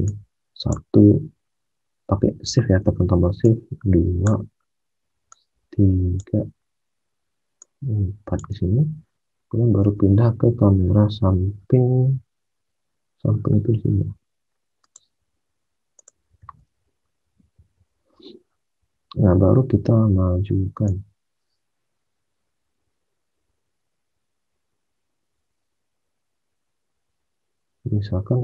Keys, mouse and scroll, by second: 9.8 space, 16.3 space.